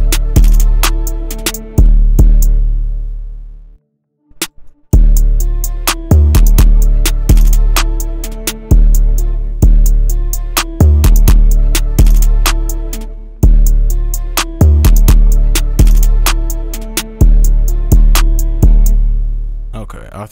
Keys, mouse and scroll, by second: 0.2 double click, 2.2 space, 2.6 space, 3.4-4.0 scroll up 1, 4.0 right click, 4.9 space, 9.3 space, 13.0 space, 13.4 space, 14.3-15.4 scroll down 1, 15.4 scroll down 1, 15.4-17.4 scroll up 1, 18.9 space.